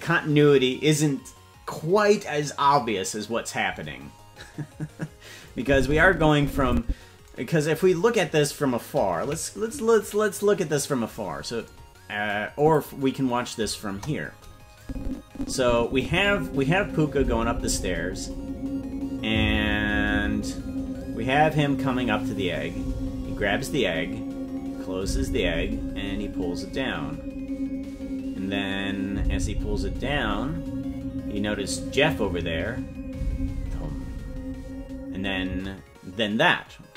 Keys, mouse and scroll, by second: 5.4-6.8 drag, 7.7-9.2 scroll down 2, 9.2 scroll down 4, 9.2 KP_Decimal, 9.8-10.3 scroll down 3, 12.5 click, 13.9 KP_0, 14.7-16.0 drag, 16.0 space, 19.1-19.7 scroll up 2, 35.4 space.